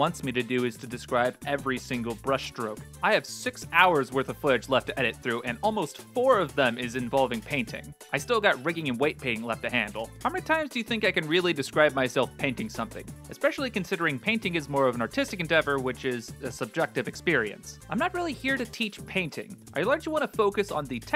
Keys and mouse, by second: 0.2 click, 0.4 click, 0.6 middle click, 0.8 click, 1.1 middle click, 1.3 middle click, 1.4 ctrl+z, 1.7 click, 1.8 click, 2.1 click, 2.4 ctrl+z, 2.6 middle click, 3.0 click, 3.2 click, 3.4 click, 3.7 middle click, 3.8 click, 3.9 middle click, 4.1 click, 4.2 middle click, 4.2 shift+space, 4.3 middle drag, 4.5 click, 4.6 middle click, 4.6 s, 5.2 middle click, 5.4 middle click, 5.7 click, 6.0 middle click, 6.4 click, 6.6 click, 6.8 f, 7.3 middle click, 7.6 click, 7.9 click, 8.2 middle click, 8.6 click, 8.9 click, 9.4 middle click, 9.5 ctrl+z, 9.6 f, 9.7 click, 9.8 click, 10.2 f, 10.2 click, 10.7 middle click, 11.1 click, 11.2 f, 11.2 click, 11.3 click, 11.7 click, 11.9 click, 12.0 click, 12.3 middle click, 12.5 shift+middle click, 12.7 f, 12.8 click, 12.9 shift+middle click, 14.0 click, 14.2 middle click, 14.3 ctrl+z, 14.3 shift+middle click, 14.6 click, 14.8 click, 15.0 f, 15.0 click, 15.5 click, 15.6 click, 16.0 middle click, 16.1 click, 16.4 click, 16.7 click, 16.8 shift+f, 16.9 click, 17.2 s, 17.2 r, 17.6 middle click, 17.7 click, 17.9 click, 18.2 click, 18.6 middle click, 18.9 f, 19.0 click, 19.1 middle click, 19.2 ctrl+z, 19.2 click, 19.4 click, 19.6 middle click, 19.6 c, 19.7 click, 19.9 click, 20.0 shift+f, 20.5 click, 20.7 ctrl+z, 20.8 click.